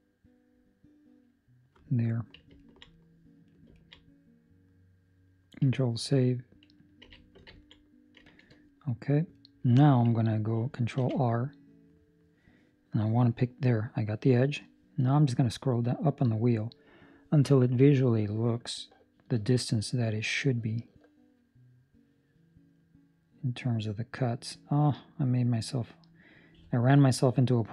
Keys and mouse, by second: 2.5 ctrl+middle click, 2.9 middle click, 3.7 ctrl+middle click, 3.9 middle click, 7.0 ctrl+s, 7.5 ctrl+middle click, 7.7 middle click, 8.2 shift+middle click, 8.6 middle click, 9.3 middle click, 9.5 shift+middle click, 10.9 ctrl+r.